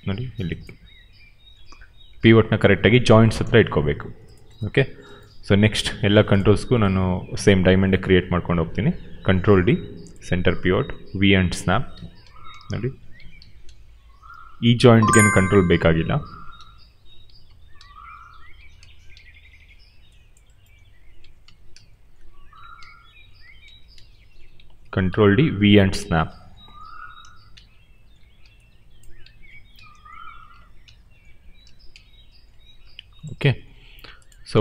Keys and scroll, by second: 0.2 d, 0.7 v, 1.4 d, 9.2 ctrl+d, 10.7 v, 12.2 ctrl+d, 12.4 v, 13.2 ctrl+d, 13.6 v, 16.2 ctrl+d, 16.4 v, 17.4 ctrl+d, 17.7 v, 18.7 ctrl+d, 19.1 v, 21.4 ctrl+d, 21.6 v, 22.4 ctrl+d, 22.7 v, 23.6 ctrl+d, 23.9 v, 24.7 ctrl+d, 25.0 v, 25.9 ctrl+d, 26.2 v, 27.1 ctrl+d, 27.4 v, 29.4 ctrl+d, 29.7 v, 30.4 ctrl+d, 30.7 v, 31.6 ctrl+d, 31.8 v.